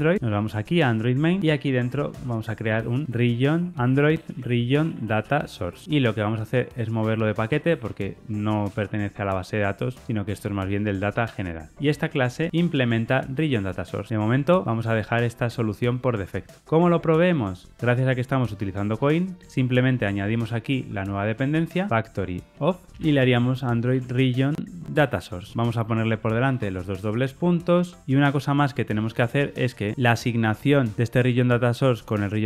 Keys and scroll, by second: 2.5 super+n, 3.7 super+a, 8.6 alt+Return, 13.5 Tab, 25.0 Return, 25.7 Escape.